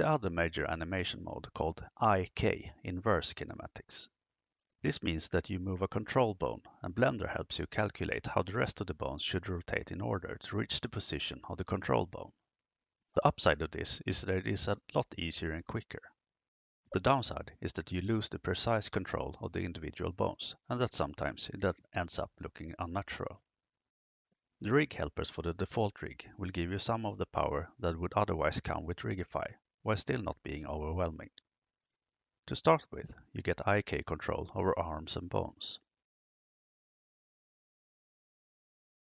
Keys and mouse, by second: 0.5 right click, 1.5 g, 4.6 click, 36.6 KP_3, 38.5-39.0 shift+middle drag.